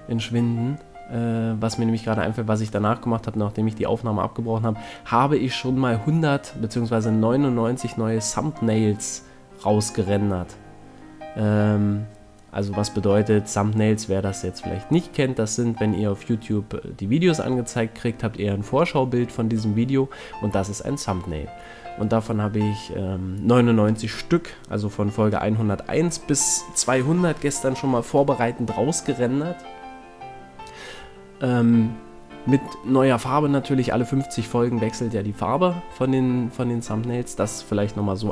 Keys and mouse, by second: 1.3 KP_1, 2.2 middle click, 4.4 ctrl+Tab, 5.8 a, 6.0 c, 10.4-12.4 middle drag, 12.8 z, 13.0 middle click, 13.5 c, 18.6-22.6 middle drag, 20.6 a, 21.0 c, 25.3 a, 26.9 KP_1, 28.9 c, 30.6 middle click, 31.6 KP_1, 35.2 c, 36.3-38.1 right drag.